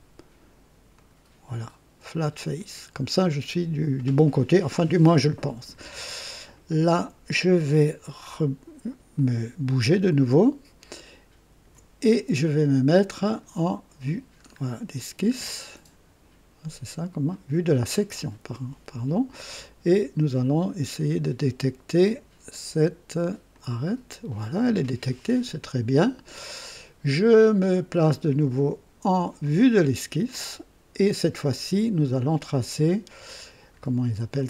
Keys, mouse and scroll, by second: 0.9 click, 2.5 click, 9.1-11.7 ctrl+alt+drag, 13.2 click, 14.4-14.8 scroll up 2, 14.9 scroll down 2, 19.4 click, 23.5 click, 29.4 click.